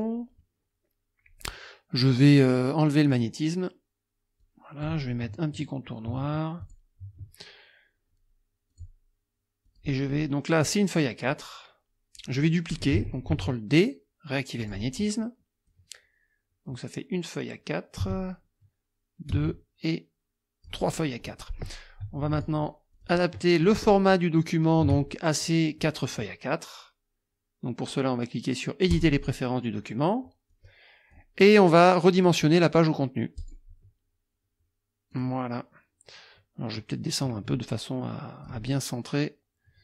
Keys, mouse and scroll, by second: 0.0 click, 3.1 click, 4.4 click, 6.6 shift+click, 8.7 click, 9.6 click, 11.3-12.4 drag, 13.3 ctrl+d, 14.6 click, 15.7-21.1 drag, 18.0 space, 19.3 space, 21.2 click, 22.3 shift+click, 23.0 shift+click, 23.6 shift+click, 24.6 shift+click, 28.9 click, 30.5 click, 32.2 click, 33.4 click, 35.1 click, 36.9-38.6 drag.